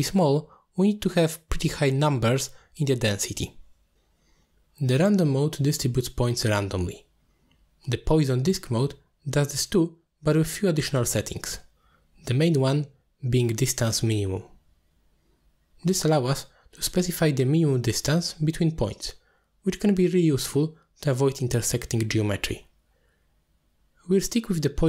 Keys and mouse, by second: 8.4-9.4 drag, 15.4-18.9 drag, 17.1 0, 23.3-24.8 shift+drag.